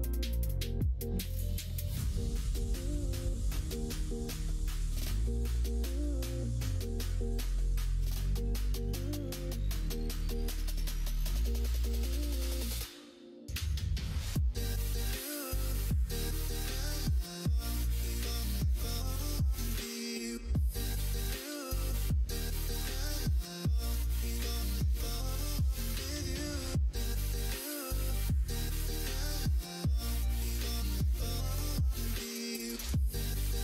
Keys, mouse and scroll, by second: 3.2 middle click, 4.1 scroll up 1, 4.2 middle click, 5.7-8.1 drag, 8.1 middle click, 9.6 click, 10.4 click, 10.6 click, 10.8 click, 11.2 click, 12.0 middle click, 12.9 KP_1, 13.4 KP_3, 16.8-24.7 drag, 25.2-31.0 drag, 27.5 Left, 27.9 Right, 28.2 Right, 28.4 Right.